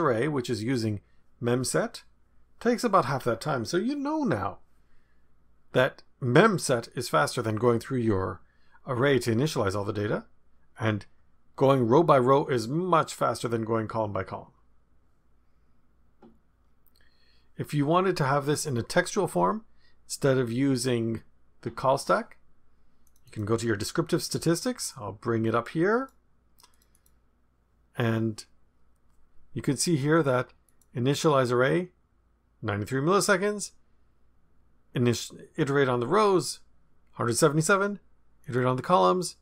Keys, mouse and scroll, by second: 19.3-20.2 scroll down 1, 23.0 click, 24.9-26.2 drag, 26.7 click, 30.6 click, 38.4 click.